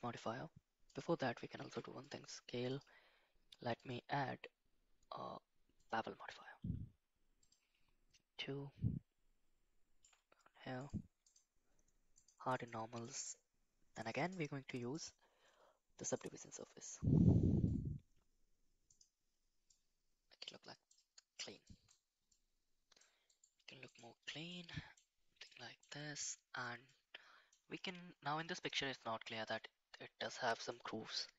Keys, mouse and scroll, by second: 0.9 click, 1.6 ctrl+a, 2.7-5.9 drag, 8.5-10.0 shift+drag, 10.8 click, 11.3 click, 12.2 click, 12.5 click, 13.0 click, 14.1-16.3 drag, 19.0 click, 19.7-20.9 middle drag, 21.6 shift+middle drag, 22.3-23.0 middle drag, 23.3-24.0 right drag, 24.5-25.0 middle drag, 25.5-25.8 middle drag, 26.9 middle click, 28.4 middle click, 29.3 middle click, 30.6 middle click.